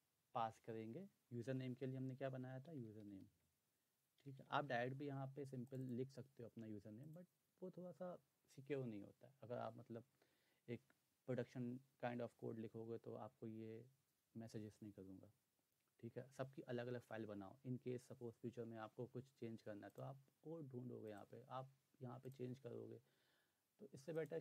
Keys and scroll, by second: 2.4-5.0 typing.